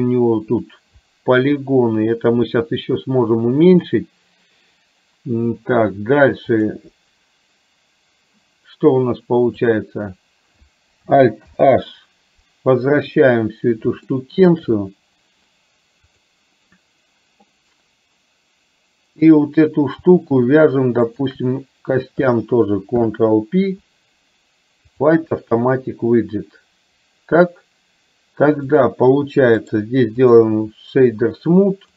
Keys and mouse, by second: 6.6-8.3 drag, 9.6 click, 11.5 alt+h, 13.0 KP_3, 14.1-14.5 shift+middle drag, 16.0 click, 21.3 shift+click, 23.0 ctrl+p, 29.6 right click.